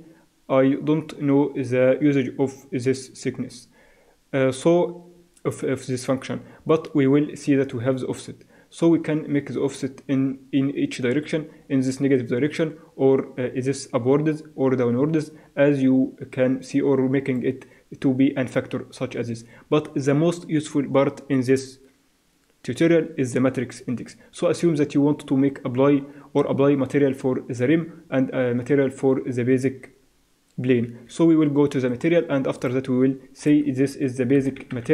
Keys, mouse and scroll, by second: 7.8-9.6 drag, 30.9 Escape, 31.8-34.1 drag, 34.2 click.